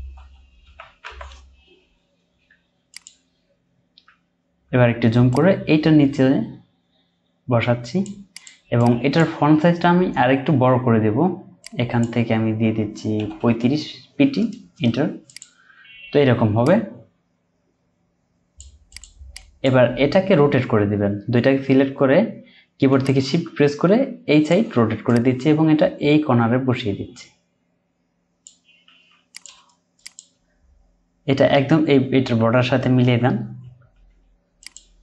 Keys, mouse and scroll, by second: 0.1-1.0 typing, 4.2-4.7 alt+scroll up 1, 8.8 double click, 13.2 typing, 14.7 Return, 15.9-16.3 scroll down 1, 19.3 double click, 20.7-22.7 scroll down 1, 23.0 shift+click, 30.3 Left, 32.1 Left.